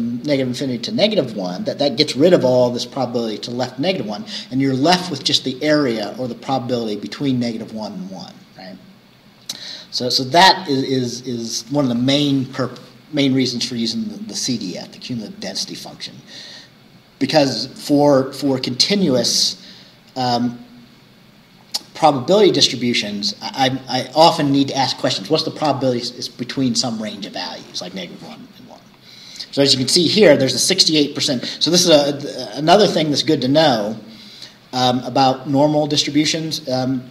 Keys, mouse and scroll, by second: 8.3 scroll down 2, 9.5-13.0 scroll down 2, 13.0-17.2 scroll down 1, 17.2-21.5 scroll down 1, 21.5-23.0 scroll down 1, 23.0-23.3 scroll up 2, 28.7 scroll down 2, 30.4-30.8 scroll down 2, 31.7 scroll up 2, 33.5 scroll down 2, 34.9-35.3 scroll down 2.